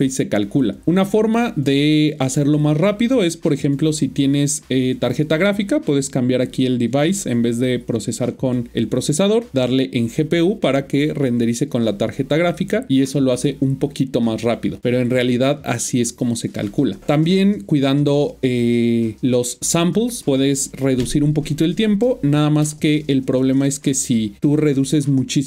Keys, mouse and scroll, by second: 7.1 click, 10.2 click, 24.4 click.